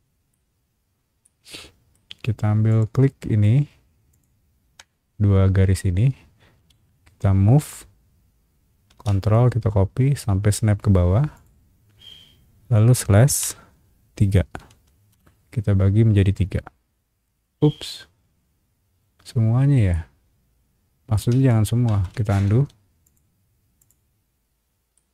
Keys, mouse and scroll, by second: 0.5 scroll up 1, 1.2 shift+middle click, 1.9 scroll up 1, 2.7 shift+click, 4.1 shift+click, 6.5 m, 7.5 click, 11.3 click, 13.3 /, 14.6 3, 15.1 Return, 19.9-21.1 middle drag, 21.8 ctrl+z, 22.5 space, 23.0 click, 23.8 click, 24.9-25.1 middle drag.